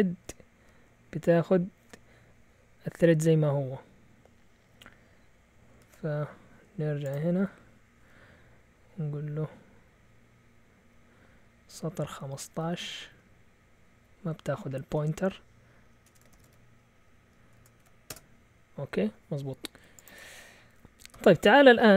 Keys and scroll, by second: 5.8 shift+super+z, 10.5-10.8 Down, 12.2 Up, 12.4 Up, 13.0 Right, 13.2 Right, 13.7 Right, 14.9 x, 16.1-18.6 typing, 21.1 q.